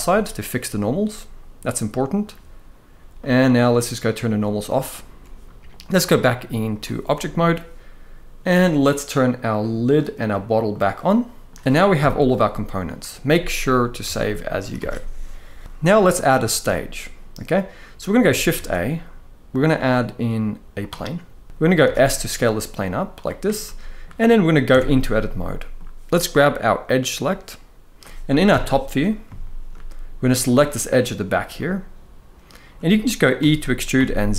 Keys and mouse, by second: 0.0-1.9 middle drag, 2.9-4.4 drag, 5.6-6.5 drag, 9.6 click, 10.4 click, 10.8-11.2 middle drag, 11.7 KP_1, 13.8 ctrl+s, 14.4 ctrl+s, 14.5 ctrl+s, 15.6 alt+a, 16.1 shift+middle click, 18.2 shift+a, 21.5 s, 23.4-23.7 middle drag, 24.4 Tab, 25.0-25.4 middle drag, 28.2 KP_7, 29.1 shift+middle click, 30.2 click, 31.3-32.5 middle drag, 33.1 e, 33.7 z.